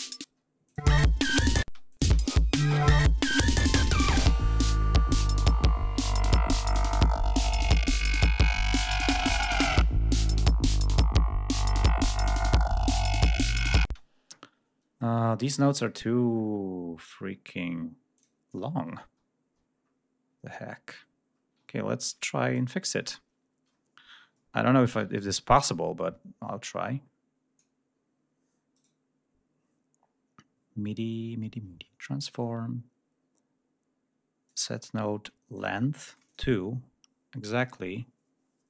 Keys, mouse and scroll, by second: 0.1 space, 0.6 click, 1.5 space, 1.8 click, 2.5 ctrl+scroll down 2, 4.7 ctrl+scroll down 2, 7.3 ctrl+scroll up 3, 8.0-8.5 scroll down 4, 9.3 g, 10.1 click, 10.6-11.0 scroll up 2, 11.0-11.4 scroll down 2, 11.7-12.5 scroll up 2, 12.9-13.2 scroll down 2, 13.8 space, 18.1 click, 19.0 ctrl+scroll up 1, 19.6 ctrl+scroll down 1, 20.6-21.4 scroll up 2, 21.6 ctrl+scroll down 2, 22.5-24.4 ctrl+drag, 24.4 ctrl+scroll up 2, 25.3 ctrl+scroll up 1, 28.7 right click, 32.1 click, 34.4 click, 35.5 click, 36.2 click, 37.4 click.